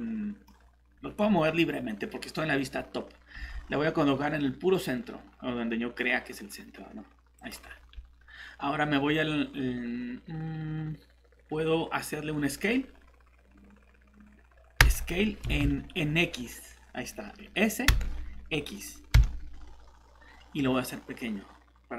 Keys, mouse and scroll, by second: 3.3 g, 3.4 g, 7.4 click, 9.4-14.7 scroll up 1, 14.8 s, 15.4 Escape, 17.9 s, 19.1 x.